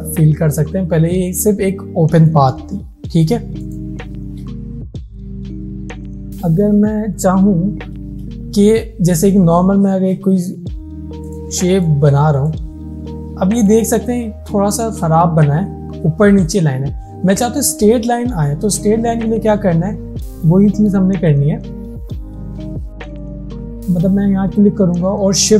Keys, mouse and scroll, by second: 3.7 click, 3.7 click, 7.2 click, 11.3 click, 11.3 click, 15.1 alt+scroll up 1, 18.8 ctrl+Num_Lock, 18.8 alt+scroll up 1, 19.0 ctrl+z, 20.2 alt+scroll down 1, 21.0 space, 21.1 click, 23.4 click, 25.4 click.